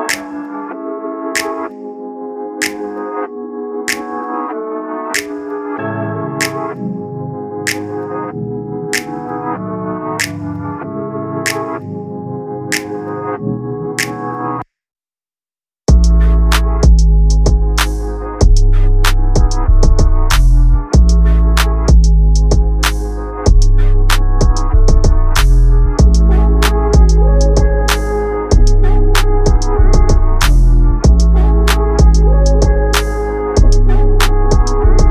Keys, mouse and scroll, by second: 5.8 ctrl+Up, 6.0 ctrl+Up, 6.1 ctrl+Up, 6.2 ctrl+Up, 9.3-16.3 drag, 16.6 ctrl+scroll, 18.4 click, 21.0 ctrl+scroll, 21.8-26.7 drag, 28.9 shift+click, 30.0 ctrl+g, 30.9-32.8 drag, 35.0 ctrl+g.